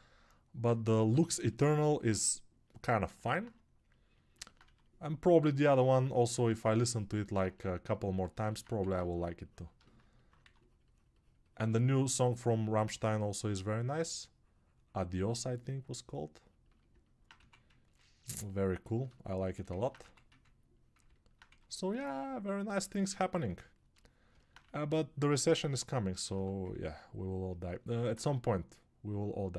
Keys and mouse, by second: 8.1-16.7 alt+shift+drag, 8.1-16.7 alt+shift+right drag, 8.9 ctrl+1.